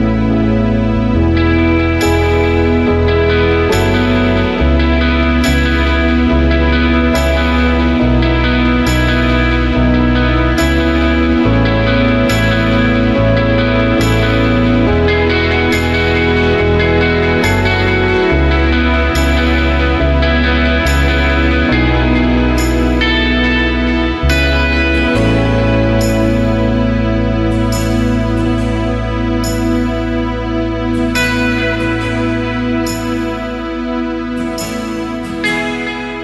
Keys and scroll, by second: 23.9 space, 25.9 space.